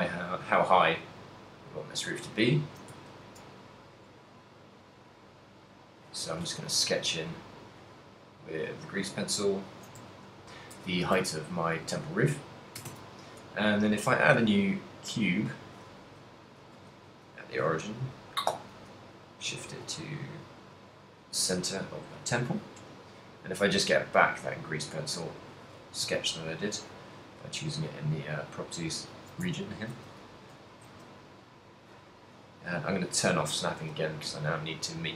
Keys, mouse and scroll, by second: 0.0-3.6 typing, 1.5 click, 3.9 click, 6.2-6.9 d, 6.9 click, 7.5 d, 8.0 click, 8.0 d, 9.8 d, 10.0 z, 11.4 ctrl+middle click, 13.0 shift+a, 16.8 alt+g, 17.5 g, 18.5 right click, 18.6 z, 18.9 g, 21.5 click, 24.1 click, 26.2 z, 27.7 middle click, 28.2 middle click, 29.6 Tab, 30.7 z, 30.7 g, 31.9 click, 33.3 click, 33.8 s.